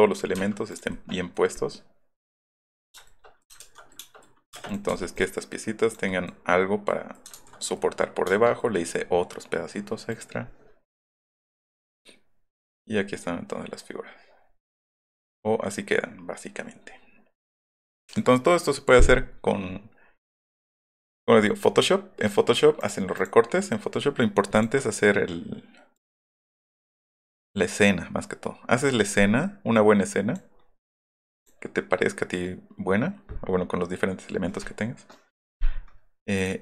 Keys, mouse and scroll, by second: 0.4 Left, 0.7 click, 1.1 middle click, 1.5 middle click, 3.6 ctrl+z, 4.5 space, 4.7 middle click, 4.9 m, 5.1 middle click, 6.1 middle click, 6.9 middle click, 7.3 shift+z, 12.5 middle click, 15.0 middle click, 15.4 middle click, 18.1 click, 20.9 click, 22.3 click, 22.8 click, 23.2 click, 24.6 click, 26.0 click, 26.4 click, 29.8 click, 31.4 click, 36.4 click.